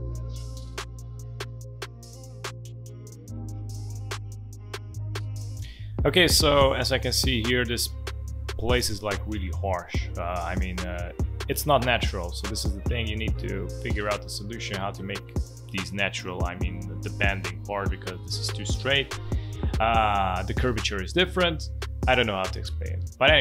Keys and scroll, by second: 0.1 space, 2.3 ctrl+z, 3.5 space, 5.2 space.